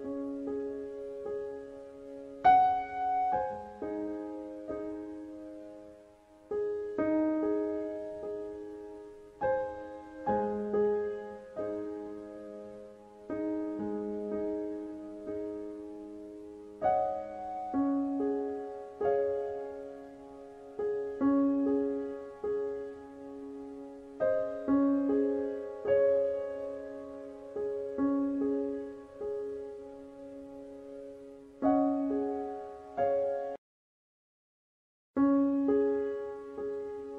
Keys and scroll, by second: 21.5 KP_4, 21.6 KP_5, 22.5 Return, 36.5 KP_1.